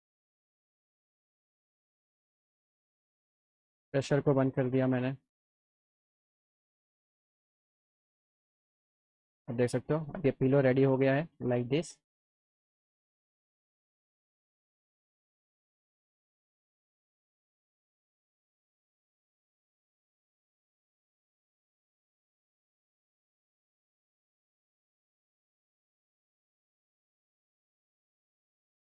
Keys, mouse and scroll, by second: 0.9 alt+click, 2.1 right click, 3.5 click, 4.2 click, 8.0 alt+middle click, 9.5 click, 10.4 alt+middle click, 10.7 alt+click, 12.4 alt+click, 12.5 alt+middle click, 13.1 click, 15.3 click, 16.9 alt+middle click, 17.7 click, 18.6 alt+middle click, 19.6 click, 20.5 alt+middle click, 21.3 click, 22.5-23.7 shift+drag, 24.4 click, 24.9-26.1 alt+middle drag, 26.5 ctrl+click, 27.2 click, 28.5 alt+middle click.